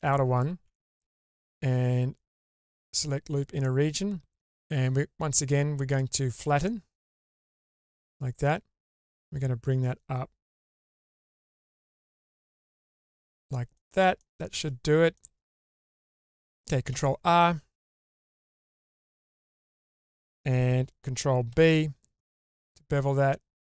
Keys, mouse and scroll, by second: 0.1 alt+click, 1.3 q, 3.6 middle click, 5.9 click, 6.7-7.8 middle drag, 8.9 click, 9.2-10.5 drag, 10.7-12.0 middle drag, 12.8 click, 13.7 middle click, 14.2 shift+middle click, 14.9 scroll down 1, 15.1 middle click, 15.9 scroll up 2, 16.9 ctrl+r, 21.5 ctrl+b.